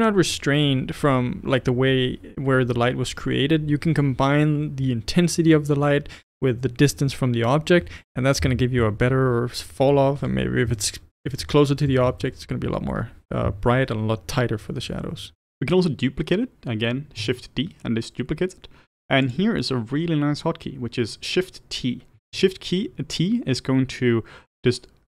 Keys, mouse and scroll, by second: 8.6 g, 11.3 r, 12.2-17.4 middle drag, 17.4 shift+d, 19.7-22.2 middle drag, 22.2 shift+t.